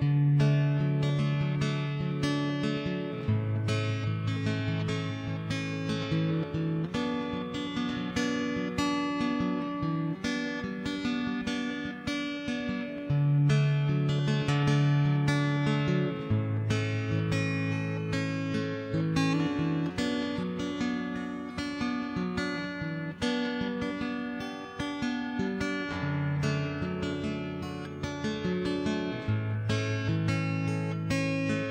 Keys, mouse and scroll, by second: 0.9 middle click, 3.6 Tab, 3.8 x, 4.2 alt+h, 4.5 a, 4.6 click, 4.7 right click, 4.8 Tab, 5.2 click, 5.3 Escape, 5.3 right click, 5.3 KP_Decimal, 5.5 middle click, 5.8 ctrl+Tab, 6.1 click, 6.1 right click, 6.5 middle click, 6.6 right click, 6.7 click, 7.0 middle click, 7.2 right click, 7.5 shift+s, 7.7 middle click, 8.1 a, 8.4 ctrl+KP_3, 8.6 Tab, 8.6 middle click, 9.2 shift+a, 10.6 middle click, 11.0 s, 11.7 middle click, 12.1 click, 12.7 click, 13.3 click, 13.9 middle click, 14.1 click, 14.5-15.8 middle drag, 16.0 middle click, 16.4 click, 16.6 middle click, 17.0 click, 17.6 click, 18.4 click, 18.7 middle click, 20.4 Tab, 20.8 Tab, 21.4 shift+space, 22.4 click, 22.8-24.5 middle drag, 24.8 click, 25.4 ctrl+z, 25.7 middle click, 26.1 click, 26.5 ctrl+a, 27.2 right click, 27.4 middle click, 28.1 middle click, 30.0 middle click, 30.2 Tab, 30.2 right click, 30.4 middle click, 30.8 a, 30.8 g.